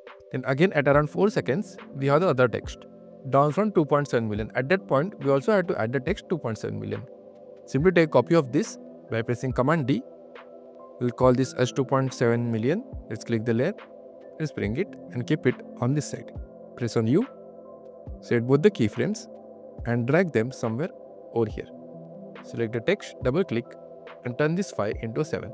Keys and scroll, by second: 6.4 q, 8.3 super+q, 8.6 super+d, 9.2 q, 10.4 Return, 10.7-13.4 typing, 16.4-17.9 typing.